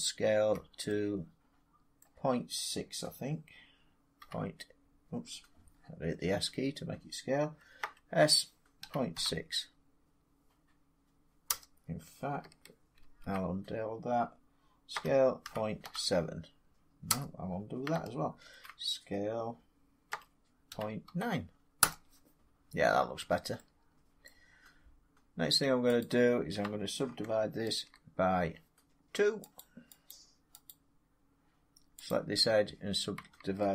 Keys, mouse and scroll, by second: 1.3 typing, 1.9 middle click, 4.4 scroll, 5.7 scroll, 5.8 middle click, 5.9 middle click, 6.0 middle click, 6.4 middle click, 6.5 middle click, 7.7-9.0 typing, 11.4 Return, 12.9 ctrl+z, 14.8-15.7 typing, 17.0 Return, 18.3 ctrl+z, 20.0-21.9 typing, 21.7 Return, 24.1 middle click, 24.7 middle click, 24.8 middle click, 25.9 click, 27.5 ctrl+r, 27.5 scroll, 28.7 scroll, 29.5 click, 30.0 click, 30.7 click, 32.0 click, 32.3 middle click, 32.3 middle click, 32.4 middle click.